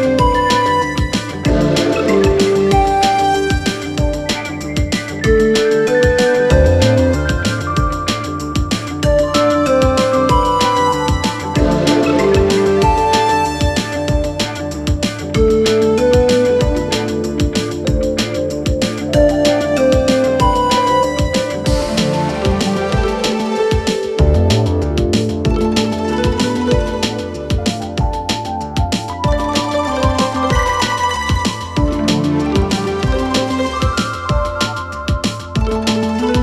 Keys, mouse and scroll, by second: 1.5 click, 3.7 Return, 5.5 click, 6.8-17.3 click, 19.3 alt+], 20.5-25.1 click, 27.5 alt+[, 30.3 s, 30.9 s, 31.3 click, 32.4 Return, 34.9 click.